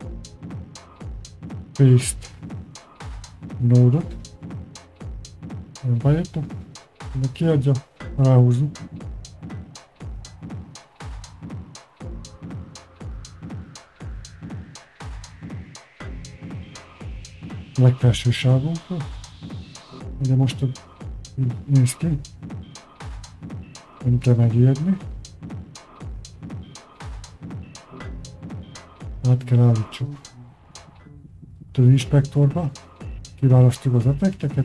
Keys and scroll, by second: 0.4 y, 27.0 Return, 27.1 Home.